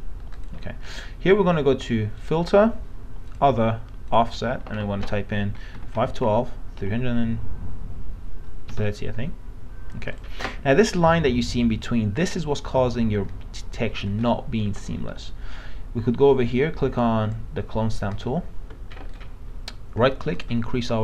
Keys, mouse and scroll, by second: 5.7 KP_5, 5.9 KP_1, 8.7 KP_3, 10.1 click, 19.1 right click, 20.3-21.0 drag.